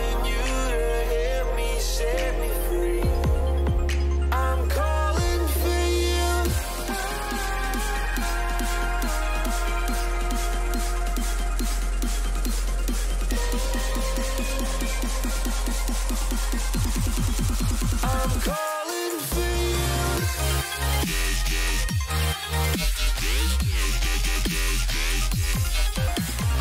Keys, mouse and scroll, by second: 0.8 a, 4.5-7.0 middle drag, 10.7-12.5 middle drag, 16.8-18.7 middle drag, 18.8 middle click.